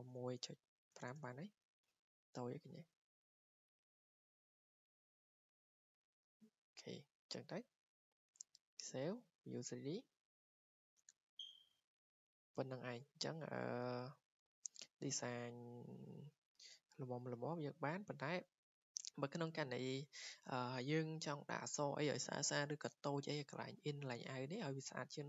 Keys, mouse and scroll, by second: 0.0-1.4 typing, 2.4-4.2 drag, 2.4 typing, 4.6 Return, 6.5 click, 8.3 ctrl+s, 8.9 click, 9.4 click, 11.7 scroll, 12.1 scroll down 5, 13.9 scroll, 14.5 click, 16.9 click, 17.1-17.6 scroll, 18.6 click.